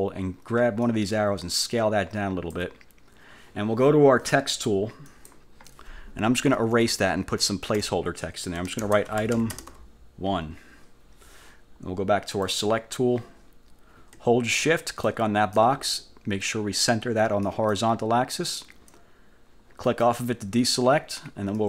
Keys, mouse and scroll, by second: 1.0-2.9 ctrl+drag, 5.2 click, 8.7-10.3 typing, 12.6 click, 15.0 shift+click, 17.6 click, 20.0 click.